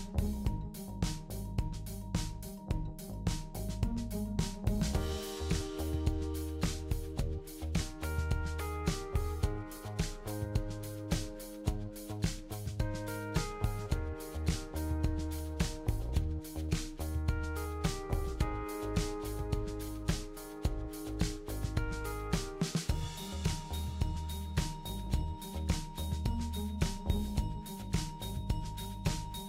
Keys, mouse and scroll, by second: 0.6 click, 2.4 click, 4.1 click, 5.2 click, 7.9 click, 9.8-11.7 drag, 13.0-14.2 drag, 15.9 click, 18.1 click, 19.3 click, 19.9 shift+click, 21.5 ctrl+l, 24.0 click, 24.6 click, 25.5 click, 26.0 shift+click, 26.9 click, 27.5 click, 27.8 shift+click, 28.4 ctrl+l.